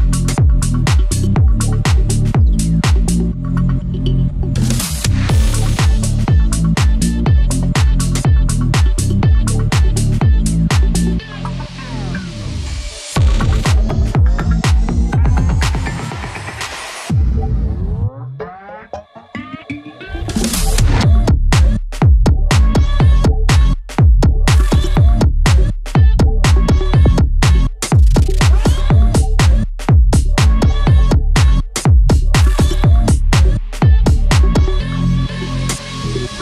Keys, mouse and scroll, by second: 2.0-2.5 scroll up 1, 2.5 click, 3.2 scroll down 1, 3.5 click, 4.0 scroll up 1, 8.4 click, 9.3 scroll down 1, 9.7 scroll up 1, 9.9-13.8 drag, 13.8 right click, 14.9 click, 16.4 click, 23.2 click, 23.8 scroll down 1, 26.2-26.6 scroll up 1, 26.6 click, 26.9-27.2 scroll up 1, 27.4 click, 27.9 ctrl+z, 28.6 click, 29.8 click, 33.4 click, 33.8-34.6 scroll down 1, 34.6 click, 35.7 ctrl+z, 36.2 scroll down 1.